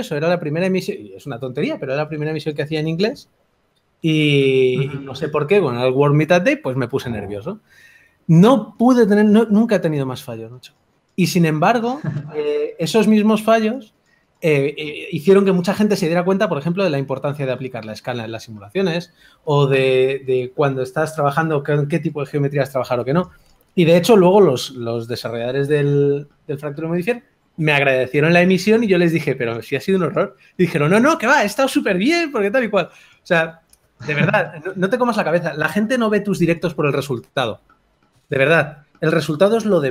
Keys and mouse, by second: 1.1 s, 3.7 s, 6.3 KP_3, 7.5 g, 9.5 Tab, 11.0 g, 11.0 f, 15.3-22.9 drag, 23.1-28.2 drag, 31.6 f.